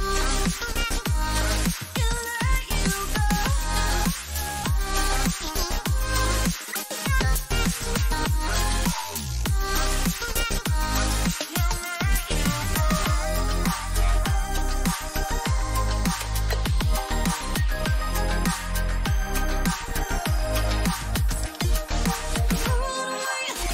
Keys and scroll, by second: 18.1 ctrl+alt+0.